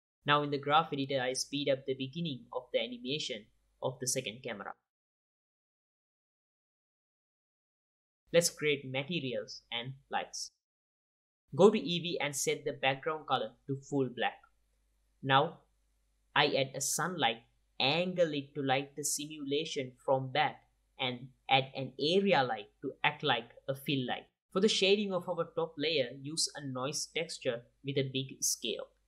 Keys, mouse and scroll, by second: 0.2 click, 0.6 click, 2.4 KP_Divide, 3.2 KP_Divide, 6.5 space, 8.0 space, 9.0-10.8 drag, 14.1 click, 15.5-18.0 typing, 15.8 click, 16.1 click, 16.6 click, 17.0 click, 18.0 click, 20.4 click, 21.0-22.3 drag, 21.7 alt+a, 22.3 shift+a, 22.5 r, 23.1 r, 23.3 click, 23.6 g, 24.0 click, 24.4 click, 25.4 click, 25.8 right click, 25.8 n, 26.1 click, 26.4 x, 26.8 click, 27.3 click, 27.9 click, 28.4 click, 28.9 middle drag, 28.9 scroll down 1.